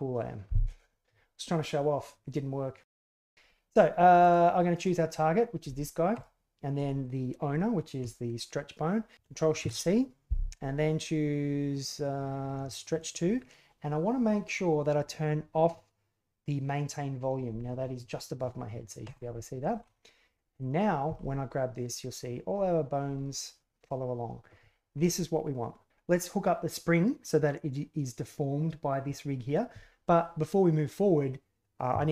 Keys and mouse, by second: 4.2 right click, 4.7 right click, 6.1 shift+right click, 9.1 ctrl+shift+c, 19.0 click, 20.6 right click, 21.0 g.